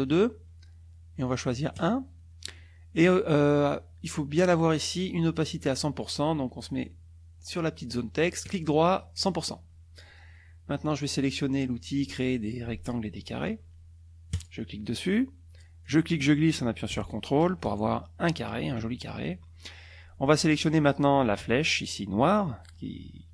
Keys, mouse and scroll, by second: 0.1 right click, 1.7 click, 8.4 right click, 9.2 click, 14.3 click, 15.8-18.7 drag.